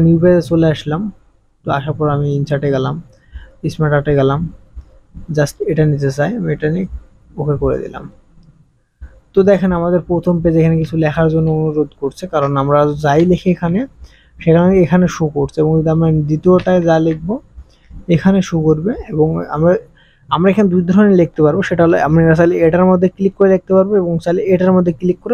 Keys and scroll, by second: 10.8 KP_5, 11.1 KP_9, 11.2 KP_5, 11.3 KP_9, 13.1 KP_4, 13.5 KP_4, 16.7 KP_8, 17.1 KP_Add, 17.1 KP_5, 17.1 KP_2, 17.6 KP_8.